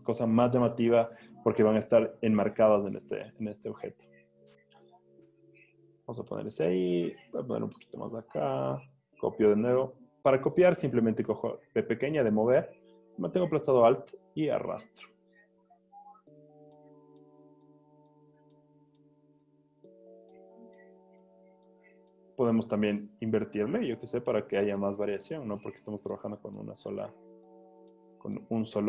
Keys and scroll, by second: 3.2 Return, 4.2 v, 11.4 v, 17.0 super+t, 21.6 Return, 22.6 super+t.